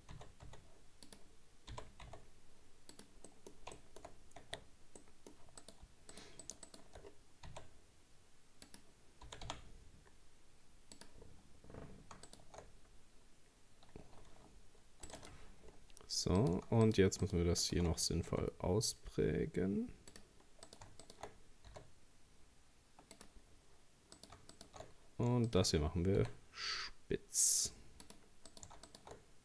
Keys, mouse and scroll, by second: 1.7 g, 3.3 middle click, 4.0-4.4 shift+scroll up 2, 4.4 Tab, 4.7 scroll down 2, 4.9 scroll up 1, 5.0 middle click, 5.6 right click, 6.1 shift+right click, 6.4 shift+right click, 6.7 shift+right click, 7.1-7.5 scroll down 3, 7.5 s, 9.3 g, 11.2-11.7 scroll up 2, 12.2 scroll up 1, 12.3 alt+shift+right click, 13.2-13.6 scroll up 1, 14.3 ctrl+r, 15.7-16.4 scroll down 2, 16.4 right click, 16.9 alt+shift+right click, 17.2 alt+shift+right click, 17.6 alt+shift+right click, 18.3 s, 20.7 right click, 21.0 alt+shift+right click, 21.7 s, 23.5 scroll up 2, 24.2 right click, 24.5 alt+shift+right click, 25.5 shift+right click, 26.2 s, 28.5 right click, 28.9 alt+shift+right click.